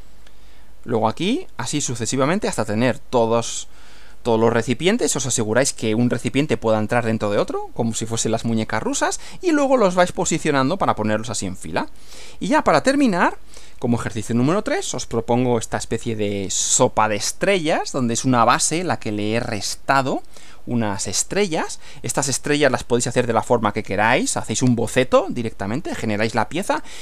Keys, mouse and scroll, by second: 12.1 click, 13.0 Right.